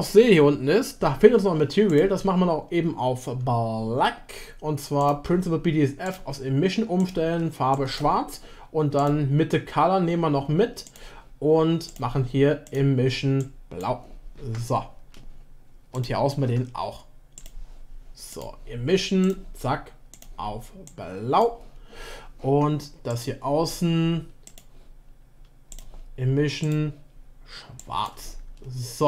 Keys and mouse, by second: 1.9 click, 5.1-6.2 drag, 9.0 click, 11.0-12.0 drag, 12.6 click, 16.0 click, 17.3 click, 18.4-19.3 drag, 23.1 click, 24.4-25.8 drag.